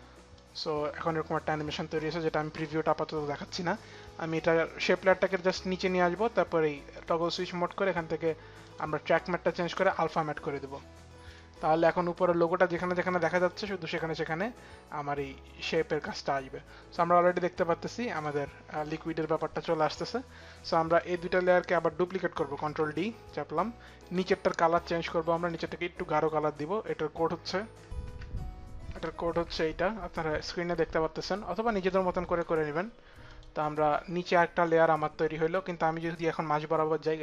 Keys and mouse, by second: 0.0 click, 3.7 click, 6.6 click, 8.3 click, 9.4 click, 11.0 click, 13.2 click, 20.6 click, 21.1 ctrl+click, 22.2 ctrl+d, 22.2 ctrl+click, 24.8 ctrl+d, 24.8 ctrl+click, 29.0 ctrl+v, 31.5 ctrl+v, 31.5 click, 33.0 click, 33.8 click, 34.3 click, 35.6 click.